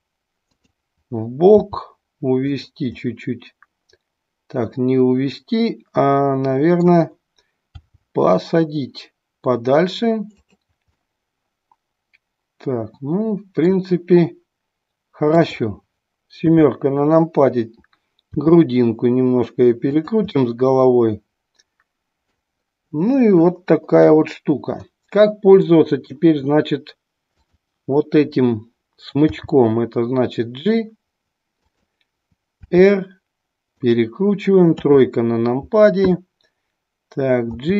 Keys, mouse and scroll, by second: 0.7 click, 1.7 g, 2.7 click, 3.1-7.1 middle drag, 7.9 g, 10.9-13.8 middle drag, 15.2 click, 18.4 r, 20.1 click, 20.3-22.5 middle drag, 25.7-26.1 middle drag, 27.3 click, 29.4 g, 31.7 click, 32.7 r, 33.9 click, 37.4 g.